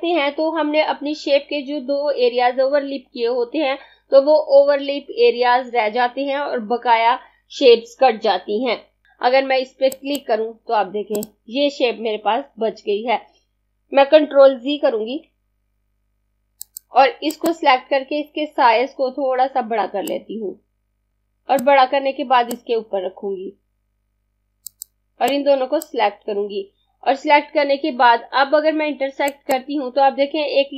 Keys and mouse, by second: 9.9 click, 15.3 z, 16.4 click, 19.8 shift+click, 29.2 click.